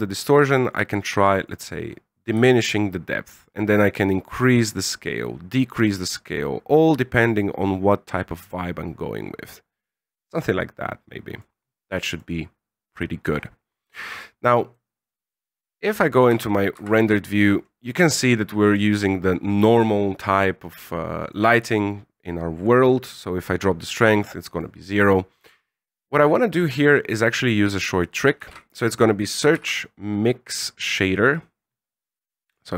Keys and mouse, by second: 1.3 click, 2.3-10.0 shift+drag, 10.4 middle click, 12.0 middle click, 14.8 middle click, 16.3 shift+z, 17.2 shift+z, 23.1-24.6 drag, 28.3 shift+a.